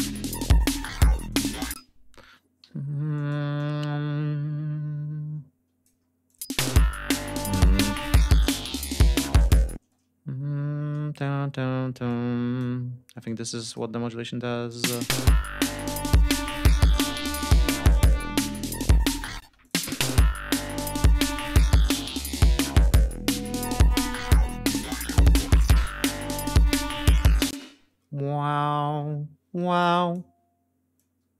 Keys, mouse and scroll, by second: 0.2 click, 1.6 space, 2.5 g, 3.0 click, 3.4-5.9 drag, 6.1 click, 6.3 space, 8.3 click, 9.3 d, 9.6 space, 11.9 click, 13.1 click, 14.5 click, 14.7 space, 15.2 g, 15.6 ctrl+alt+click, 16.1 ctrl+alt+d, 16.3 ctrl+alt+scroll down 2, 18.1 ctrl+alt+p, 19.3 space, 19.4 click, 24.4 ctrl+scroll down 2, 27.3 space, 27.5 ctrl+scroll up 1, 28.0 ctrl+d, 28.8 ctrl+scroll up 2, 29.6 click, 30.8 click.